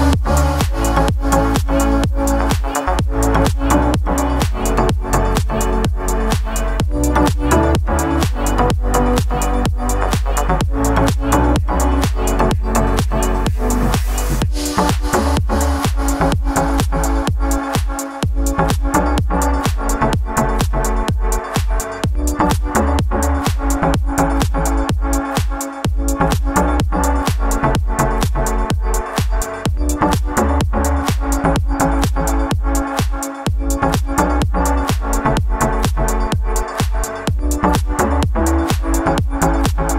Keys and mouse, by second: 0.7 s, 1.6 drag, 2.3 s, 3.4-4.0 middle drag, 4.2 click, 5.1 shift+z, 5.1 shift+middle click, 5.3 g, 6.2 shift+z, 6.6-6.9 middle drag, 7.4 shift+middle click, 8.2 middle drag, 8.9 alt+s, 9.0 middle click, 9.2 click, 9.5 alt+s, 10.3 click, 10.6 s, 12.0 middle drag, 12.4 click, 12.7 ctrl+a, 13.8 click, 14.2 shift+middle click, 14.5 shift+a, 15.0 shift+right click, 15.2 shift+z, 15.5 shift+a, 16.5 click, 17.7-18.1 drag, 18.1 s, 18.5 click, 19.1 s, 19.6 shift+middle click, 19.7 Tab, 20.1 e, 21.1 shift+middle click, 21.2 shift+z, 21.8 click, 22.6 shift+z, 22.8 Tab, 23.2 middle drag, 23.2 shift+z, 23.8 shift+h, 24.3 shift+middle click, 24.9 shift+a, 26.2 shift+middle click, 26.8 shift+z, 26.8 shift+middle click, 27.0 shift+middle click, 27.4 shift+middle click, 28.0 g, 29.1 shift+middle click, 29.4 shift+middle click, 30.4 shift+middle click, 30.6 shift+middle click, 30.9 e, 31.7 Tab, 32.0 shift+middle drag, 32.2 click, 33.1 click, 33.7 middle drag, 33.7 shift+z, 35.0 click, 35.2 middle click, 35.7 `, 36.1 shift+middle drag, 36.9-37.2 drag, 37.3 shift+middle click, 38.0 shift+click, 39.2 click, 39.5 click, 39.9 shift+middle click.